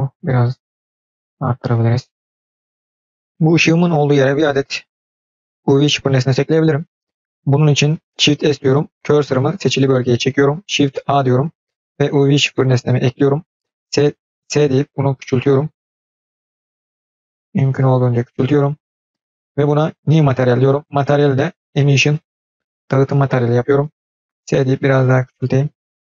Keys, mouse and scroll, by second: 8.2 shift+s, 10.8 shift+a, 14.2 s, 19.8 click, 21.0-22.0 drag.